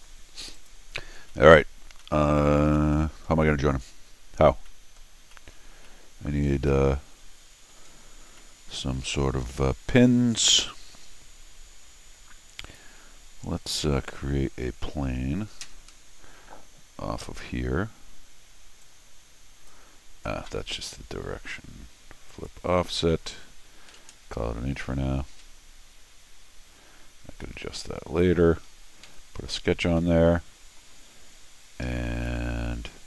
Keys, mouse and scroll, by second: 0.5 click, 1.2 scroll up 1, 1.3 middle click, 2.0 middle click, 2.7 middle click, 3.3 scroll up 2, 4.7 middle click, 5.3 middle click, 5.8 middle click, 6.5 scroll down 1, 6.7-7.7 middle drag, 8.3 middle click, 12.6 click, 18.8 click, 22.3 click, 23.9 1, 27.4 middle click, 29.0 c, 30.0 middle click, 31.3 middle click, 31.8 Escape.